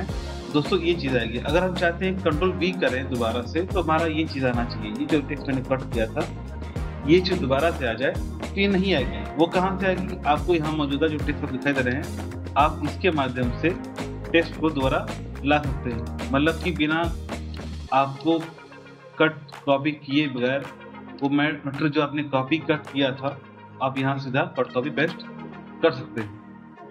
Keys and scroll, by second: 0.0 ctrl+v.